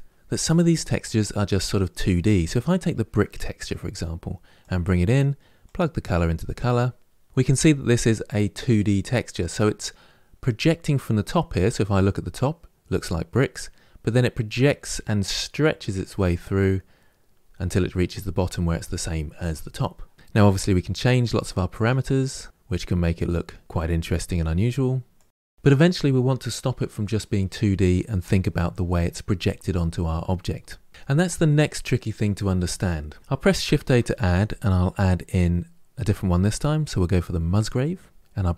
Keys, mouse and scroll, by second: 6.6-10.9 drag, 10.9-13.9 middle drag, 15.9-20.4 middle drag, 20.4-24.2 drag, 25.2 click, 25.5-38.2 middle drag, 38.2 click.